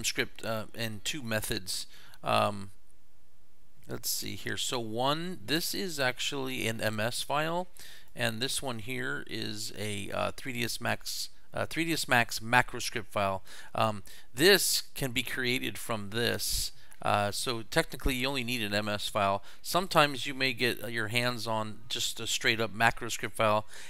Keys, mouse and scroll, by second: 4.2 click, 8.0 click, 16.4 click, 19.8 click.